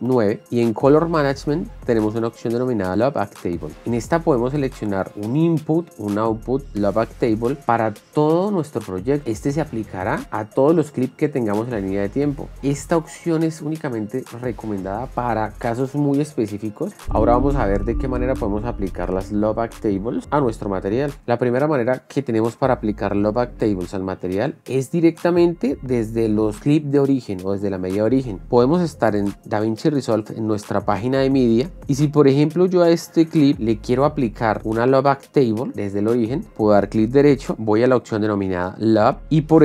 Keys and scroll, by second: 0.2 shift+9, 28.4 shift+2, 30.3 shift+2.